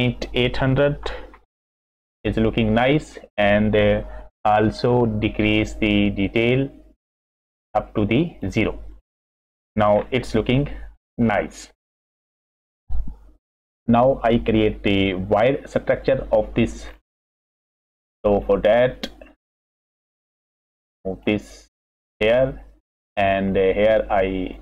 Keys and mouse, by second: 6.0-8.4 drag, 9.4 middle drag, 10.5-10.9 middle drag, 11.4-12.0 middle drag, 13.4 F6, 17.3 middle click, 18.3 middle click, 19.4 middle click, 21.7 click, 22.3 click, 23.7 click, 24.3 drag.